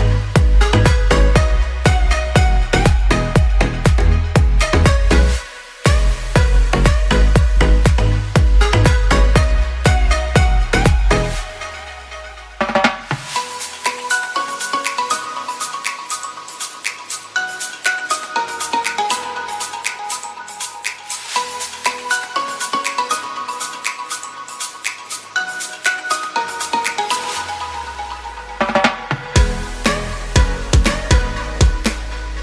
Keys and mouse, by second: 1.8 shift+middle click, 2.4 middle click, 6.9 shift+middle click, 7.9-12.4 middle drag, 13.9 alt+h, 14.3 a, 14.6 ctrl+s, 15.0 shift+middle click, 15.5-19.1 middle drag, 19.5 shift+middle click, 20.5 click, 22.7 ctrl+l, 23.5 a, 23.9 1, 24.7 3, 24.9 click, 25.6 ctrl+l, 26.4 h, 26.8 2, 27.0 middle click, 27.7 shift+middle click, 28.6 click, 29.4 ctrl+click, 29.8 ctrl+e, 30.8 a, 31.1 a, 31.4 u, 31.7 a, 32.2-32.4 shift+middle drag.